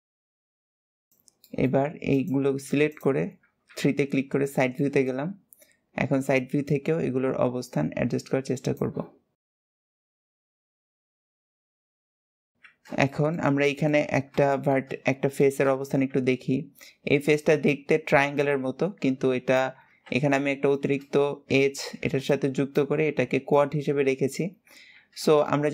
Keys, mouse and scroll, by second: 0.1 shift+scroll up 1, 0.2 shift+middle click, 0.4 click, 0.4 g, 1.0 shift+click, 1.2 shift+middle click, 1.9 shift+click, 2.6 shift+click, 3.5 KP_3, 4.2-4.6 scroll up 3, 4.6 shift+middle click, 5.1-5.6 scroll up 2, 6.4 click, 9.2 click, 9.9 shift+middle click, 10.4 click, 10.6 click, 11.0 click, 11.8-12.3 scroll down 9, 12.3 KP_7, 12.5 alt+z, 12.8-13.9 shift+middle drag, 13.9 scroll up 2, 14.3 shift+middle click, 14.8-15.2 scroll up 2, 15.2-19.7 shift+middle drag, 20.5-24.5 shift+middle drag, 25.2-25.7 shift+middle drag.